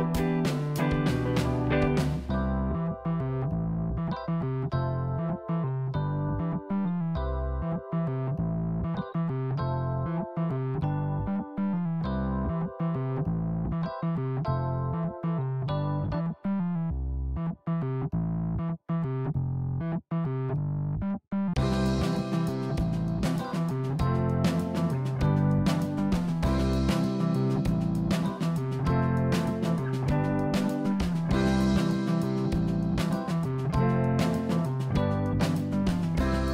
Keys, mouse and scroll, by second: 3.9 click, 4.7-6.4 middle drag, 9.7-10.9 middle drag, 10.9 ctrl+r, 12.7-13.4 scroll down 1, 13.4 middle click, 14.3-15.1 scroll up 1, 15.1 ctrl+r, 16.8 click, 17.2-18.3 scroll down 3, 18.3 scroll down 1, 18.6-20.3 middle drag, 20.9 Tab, 21.1 click, 21.4-23.1 middle drag, 24.8-25.9 drag, 26.5 click, 33.3 click, 34.2 click, 35.6-36.5 middle drag.